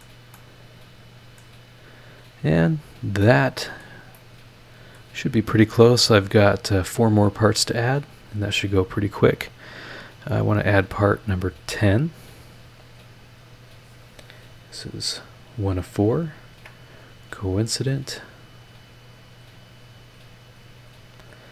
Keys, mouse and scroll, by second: 0.3 click, 1.6 scroll down 2, 2.1 scroll down 2, 2.7 scroll up 2, 3.2 click, 3.3 middle click, 4.1-5.1 middle drag, 7.9 click, 11.7 click, 13.0 click, 13.4 scroll up 1, 14.0 scroll up 2, 15.2 click, 15.7 scroll up 2, 16.5 ctrl+click, 17.8 click, 18.7 scroll down 2.